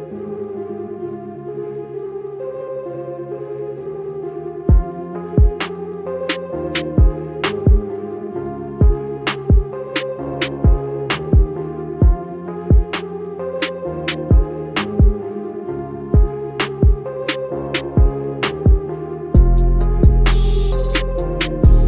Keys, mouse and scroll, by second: 6.6-7.8 drag, 14.6-15.3 scroll down 1, 15.3 scroll up 1.